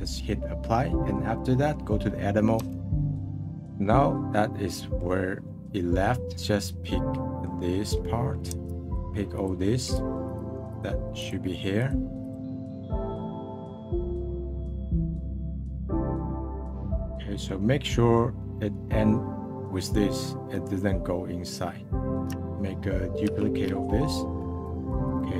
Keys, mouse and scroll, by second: 1.2-2.6 middle drag, 2.6 Tab, 2.8 click, 3.1-5.6 middle drag, 6.3-6.6 scroll up 2, 6.9 scroll up 4, 7.2 middle click, 8.9-12.5 alt+shift+drag, 12.8-13.9 alt+shift+drag, 14.5-16.1 alt+shift+drag, 16.2 alt+shift+click, 16.7 scroll down 3, 16.7 middle click, 17.5-18.1 scroll up 1, 18.1 scroll down 1, 18.4-22.2 middle drag, 23.2 shift+d.